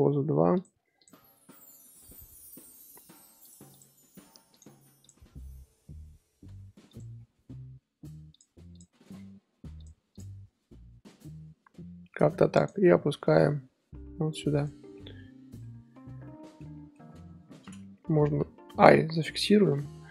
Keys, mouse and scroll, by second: 1.0 click, 1.3 r, 3.7 click, 4.5 click, 5.0 click, 5.2 r, 7.1 scroll down 5, 7.5-8.0 scroll up 1, 8.0 r, 8.7 click, 9.2 r, 10.1 click, 11.5-12.0 scroll up 1, 12.0-12.6 scroll up 1, 12.6 drag, 13.0 g, 14.8 scroll down 1, 14.9-15.6 middle drag, 15.6 a, 16.6-18.8 middle drag, 18.8 i, 19.1-20.1 scroll up 3.